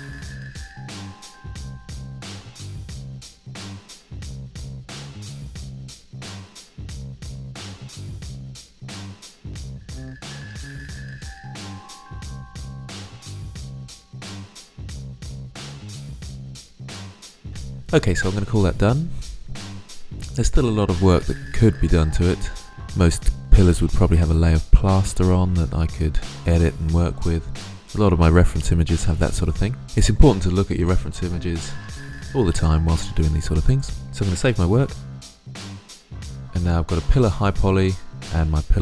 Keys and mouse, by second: 0.1 middle click, 0.5-0.8 drag, 0.8 ctrl+z, 0.9 ctrl+z, 1.4 ctrl+z, 2.1 middle click, 2.1 ctrl+z, 2.2 drag, 4.3 click, 4.7-5.4 drag, 5.5-5.9 drag, 6.2-7.1 drag, 7.7 click, 7.9 ctrl+z, 9.3-9.8 middle drag, 9.8 click, 10.7 middle drag, 10.7-11.8 drag, 12.0 middle drag, 12.7 middle drag, 12.9 click, 13.1 ctrl+z, 13.1 drag, 13.7 click, 14.1 alt+f, 15.6 click, 15.9 click, 16.1 click, 16.4 click, 16.6 middle click, 34.7 ctrl+s.